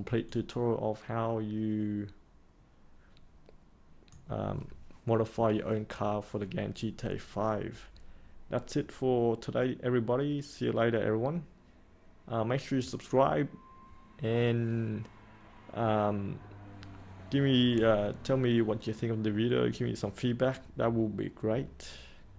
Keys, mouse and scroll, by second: 0.2-4.1 alt+drag.